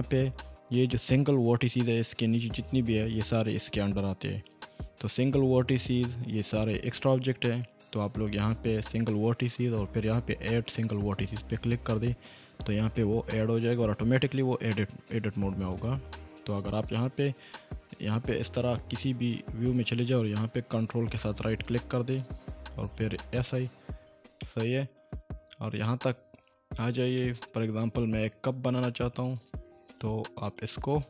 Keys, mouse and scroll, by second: 11.5 click, 15.7 click, 18.7 1, 21.5 ctrl+right click, 24.7 shift+middle click, 26.1-26.8 scroll up 2, 27.5-28.1 shift+middle drag, 28.3 scroll up 2, 29.9 ctrl+right click.